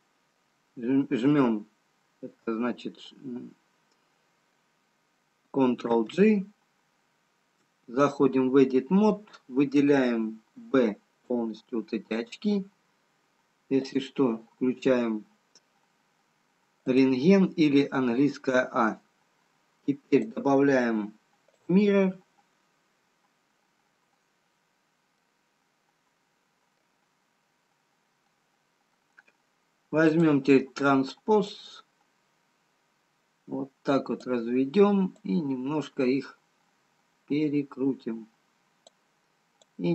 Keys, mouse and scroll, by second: 6.0 ctrl+j, 7.1 ctrl+z, 8.4 Tab, 10.5 b, 13.8 click, 17.8 a, 20.2 click, 22.4 middle click, 24.0 scroll up 1, 25.0 scroll up 1, 25.2 middle click, 27.8-28.9 scroll down 4, 29.0 middle click, 30.3 click, 31.4 click, 35.8 click, 39.6 click.